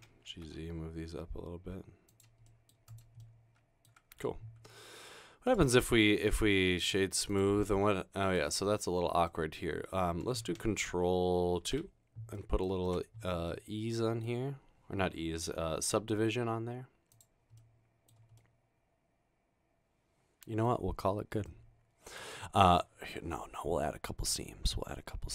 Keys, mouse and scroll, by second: 0.2-1.0 typing, 2.5 middle click, 2.9 click, 3.2 middle click, 11.9 ctrl+d, 12.4 middle click, 12.8-13.5 scroll down 2, 13.1 Tab, 13.5 middle click, 14.1 middle click, 18.4-20.7 middle drag.